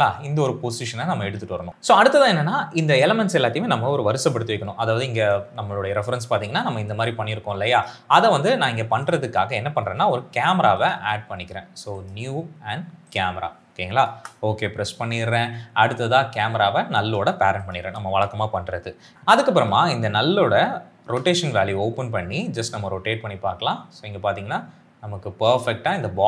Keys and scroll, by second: 14.1 Return, 21.2 r.